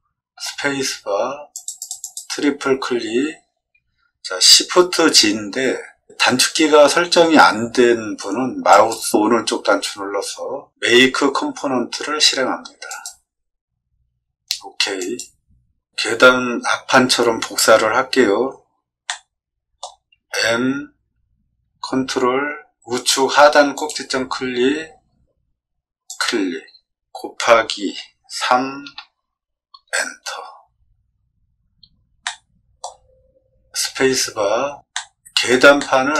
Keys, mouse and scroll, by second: 0.3 space, 1.5 click, 1.8 click, 2.0 click, 8.7 right click, 12.8 click, 14.9 click, 19.0 middle click, 20.2 m, 23.7 click, 26.0 click, 27.8 x, 28.8 3, 29.8 Return, 32.2 shift+middle click, 33.8 space, 34.9 middle click, 35.7 shift+middle click.